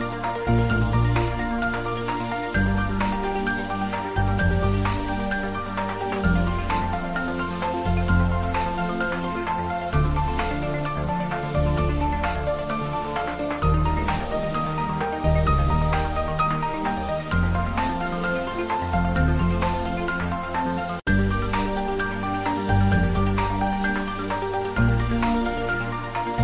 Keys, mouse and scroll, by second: 1.0 r, 1.7 click, 2.9 g, 4.3 click, 4.6 z, 4.9-6.4 middle drag, 6.4 g, 7.9 click, 8.6 ctrl+s, 8.8 ctrl+middle click, 9.3 click, 10.1 click, 12.9 click, 14.2 shift+s, 14.6 click, 17.0 h, 17.7 y, 18.3 click, 18.7 middle click, 20.1 click, 20.4 middle click, 22.0 ctrl+middle click, 22.6-23.9 shift+middle drag.